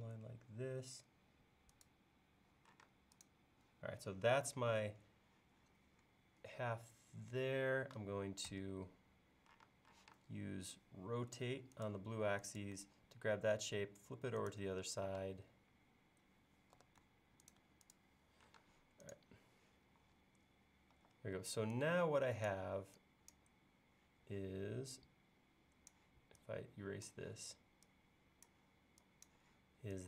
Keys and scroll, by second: 2.9 space, 8.5 a, 9.7 space, 10.1 q, 11.3 Up, 15.2 space, 16.8 b, 18.6 space, 21.0 e.